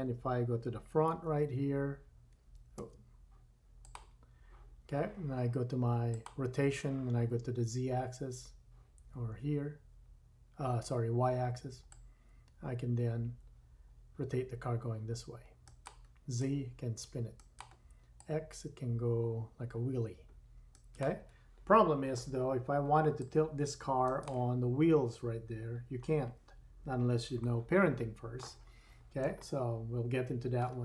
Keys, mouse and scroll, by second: 1.2 1, 2.8 `, 6.1-15.8 drag, 15.8 middle click, 16.3-17.6 drag, 17.6 middle click, 18.1-21.0 drag, 21.0-23.2 middle drag, 23.2-24.3 drag, 24.3 middle click, 26.1-27.1 scroll up 2, 26.2-27.1 middle drag, 27.1-27.5 shift+drag, 27.5-29.0 shift+middle drag, 28.7-29.3 scroll up 2, 29.3-30.6 shift+middle drag.